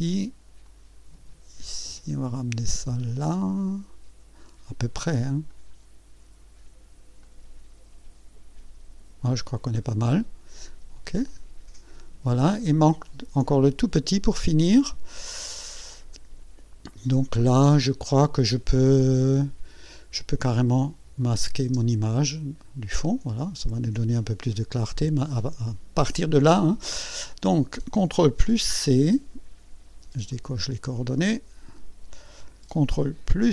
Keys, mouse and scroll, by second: 0.6-4.5 drag, 5.5 click, 7.2 click, 9.4 scroll down 1, 10.1 right click, 11.3 click, 21.2 click, 21.6 space, 23.4 click, 28.6 ctrl+c, 30.3 click, 31.7 click, 32.4-33.5 ctrl+middle drag.